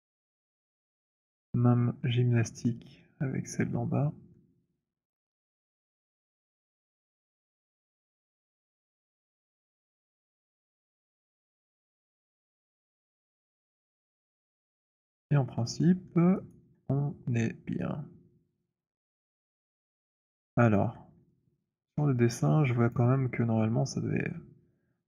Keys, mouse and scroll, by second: 0.3 alt+middle click, 0.3 click, 1.7 middle click, 2.8-5.4 c, 5.9 c, 6.1 c, 6.3 middle click, 6.3 c, 7.9 middle click, 8.5-13.0 typing, 13.4 middle click, 14.3 alt+middle click, 14.5 alt+middle click, 15.4 alt+click, 16.2 alt+middle click, 16.8 alt+right click, 19.2 right click, 19.5 click, 19.8 middle click, 20.8 alt+click, 22.1 alt+click, 22.5 alt+middle click, 22.9 alt+middle click, 23.1 alt+click.